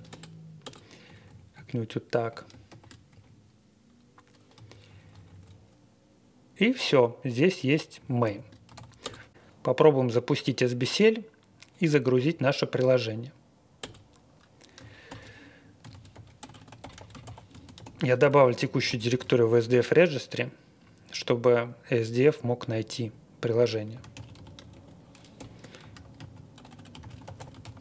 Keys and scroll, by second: 0.1 Return, 0.6 Return, 1.0 Up, 1.5 Right, 2.0 Right, 2.3 Right, 2.6 shift+3, 3.1 Right, 4.5 Escape, 4.8 Down, 5.1 Down, 5.2 Down, 5.4 Down, 7.9-9.2 typing, 12.2 Up, 13.8 Return, 15.0-19.5 typing, 23.7-27.8 typing.